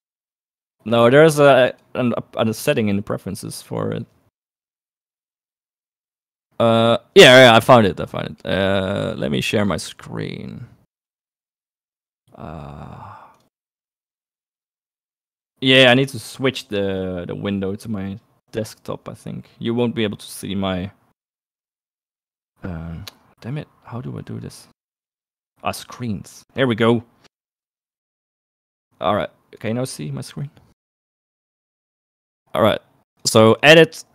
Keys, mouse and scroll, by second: 33.8-34.1 drag.